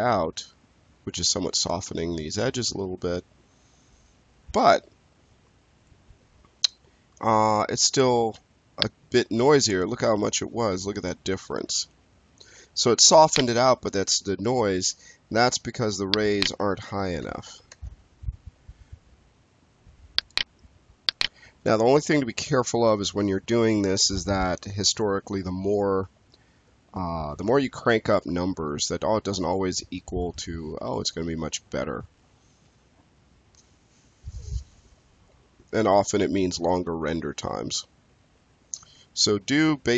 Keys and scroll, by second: 17.1 2, 17.4 5, 17.6 Return.